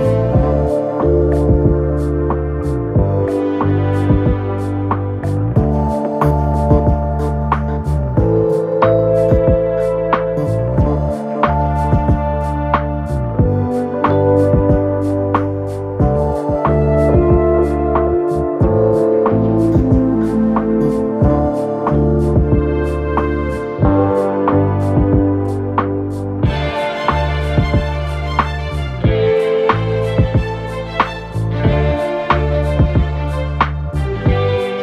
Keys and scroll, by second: 5.0 9, 5.1 Return, 8.6 ctrl+F1, 10.1 3, 16.7 3.